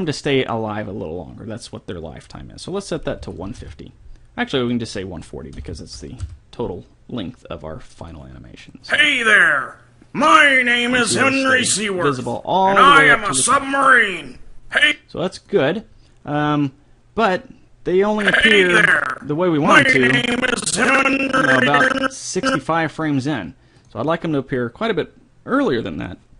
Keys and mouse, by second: 0.4-2.2 drag, 5.0-10.5 drag, 15.2-17.5 drag, 18.4-20.2 drag, 24.2-26.1 drag.